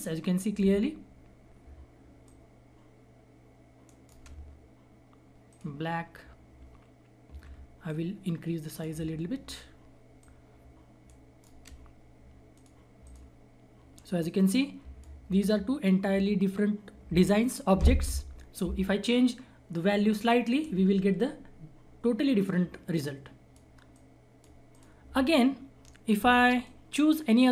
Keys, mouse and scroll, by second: 2.2-3.8 shift+drag, 3.8 shift+right click, 5.4 click, 6.0 scroll up 1, 7.8-11.0 shift+drag, 11.0-12.5 shift+right drag, 12.5 click, 13.3 scroll down 1, 14.4-16.3 drag, 16.3-17.9 scroll up 1, 17.9-19.4 scroll down 1, 22.9-27.5 drag.